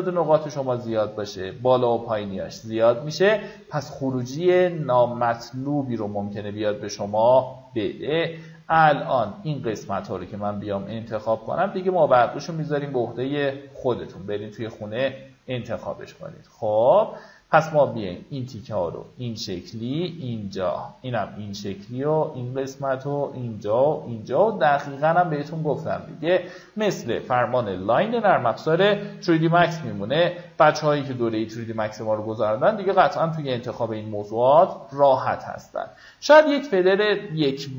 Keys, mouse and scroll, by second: 26.6-27.0 alt+scroll down 1, 27.3-27.8 alt+scroll down 2, 28.2 alt+scroll up 1, 28.9 click, 32.9 alt+scroll down 1, 33.7 alt+scroll up 1, 34.1 right click, 35.3 click, 36.6 KP_1.